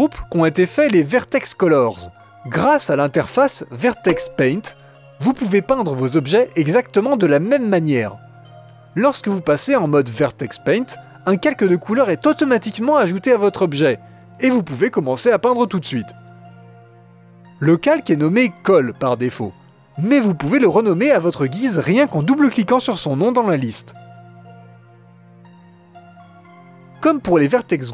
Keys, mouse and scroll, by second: 0.2-1.0 scroll down 4, 2.6-6.2 drag, 6.6-11.6 drag, 16.2-20.8 drag, 21.2-27.9 drag.